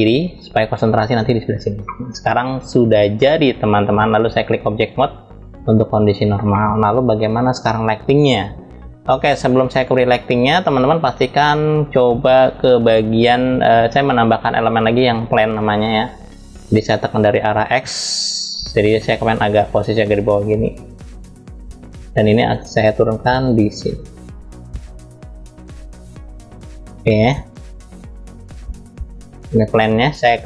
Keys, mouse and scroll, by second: 1.8-3.9 middle drag, 3.9-5.1 drag, 5.5 scroll down 2, 6.2-8.6 middle drag, 9.5 click, 13.6-15.2 drag, 17.8 click, 19.2-21.5 drag, 21.8 click, 22.8-24.9 drag, 25.2 click, 26.5-26.9 drag, 30.3 click.